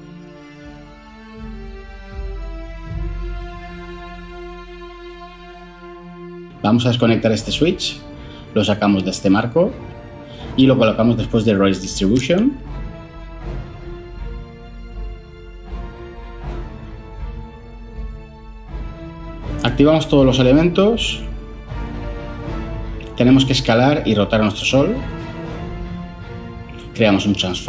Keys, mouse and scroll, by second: 0.5 ctrl+c, 0.7 ctrl+v, 26.5 ctrl+shift+a, 26.7-27.2 typing, 27.4 Return.